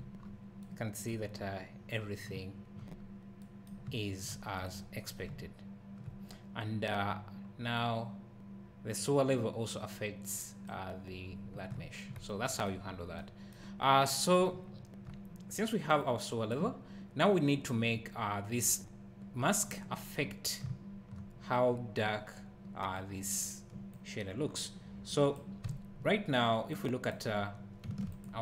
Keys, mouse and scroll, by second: 0.2 scroll up 1, 1.3 scroll up 1, 1.9 scroll down 1, 3.0-3.4 scroll up 1, 3.8 `, 4.5 click, 5.3 `, 7.7 click, 11.4 scroll down 1, 11.7 `, 12.8 scroll up 1, 14.7 `, 16.0 click, 16.8-18.0 scroll down 1, 18.5 scroll up 1, 20.2-20.7 scroll down 1, 20.7 `, 21.7-22.9 scroll up 1, 23.0 click, 23.9 click, 24.0 click, 25.7 `, 26.7 click, 26.8 click, 28.2 ctrl+shift+click.